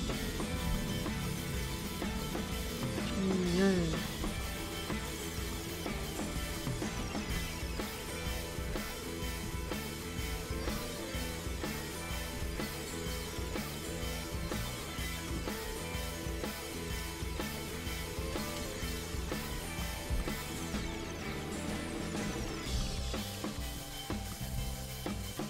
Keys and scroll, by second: 4.5 Right, 4.8 Up, 11.1 Down, 22.7 Right, 22.9 Right, 23.2 Right, 24.0 Left.